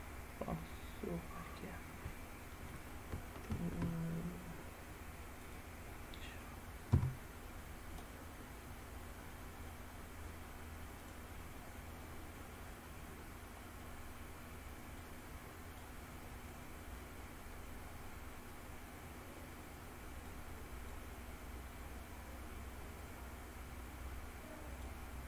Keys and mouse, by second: 2.3-2.7 middle drag, 3.5 shift+a, 6.0 drag, 6.2 middle click, 6.9 s, 11.1 drag, 11.8-12.6 middle drag, 15.0-15.9 drag, 20.3-21.0 drag, 23.1-24.9 drag.